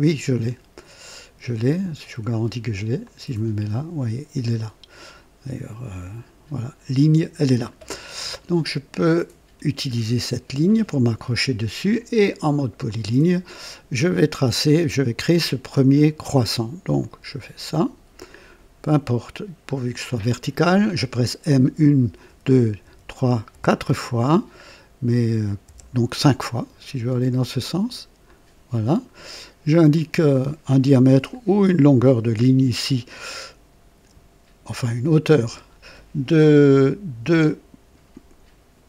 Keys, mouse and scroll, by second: 3.0 click, 4.0 right click, 8.0 scroll down 1, 12.9 click, 17.0 click, 20.0 click, 21.6-23.5 typing, 25.6 typing, 28.2 click, 28.9 right click, 29.9 right click, 31.3 click, 35.4 i, 37.2 KP_2.